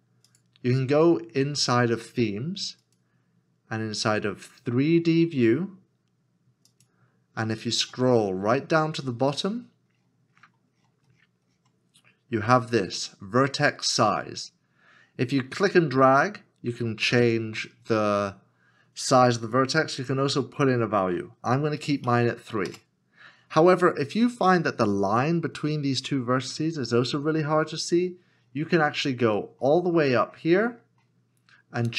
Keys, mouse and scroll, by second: 8.5 scroll down 1, 21.8 KP_3, 22.6 Return, 24.6 Return, 28.3 Return, 28.4-28.7 scroll up 1.